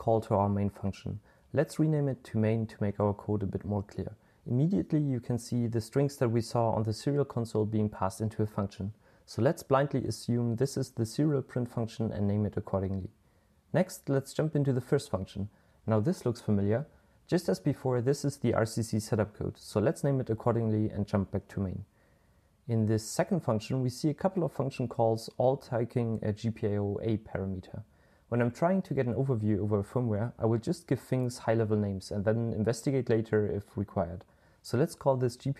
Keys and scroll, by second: 1.6-3.0 typing, 9.4-11.7 typing, 17.2-18.7 typing, 20.0-21.3 typing, 25.4-27.7 typing, 29.2 typing, 30.2-34.8 typing.